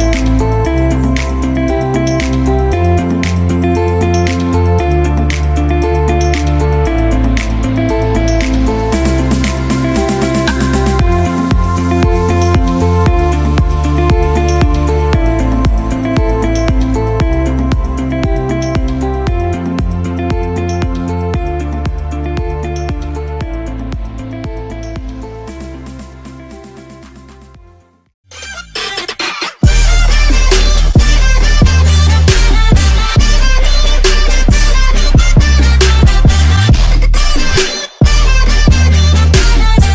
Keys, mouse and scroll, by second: 1.5-3.3 scroll down 1, 3.5 click, 5.3 Return, 8.4 click, 11.2 typing, 11.9 click, 15.3-16.0 typing.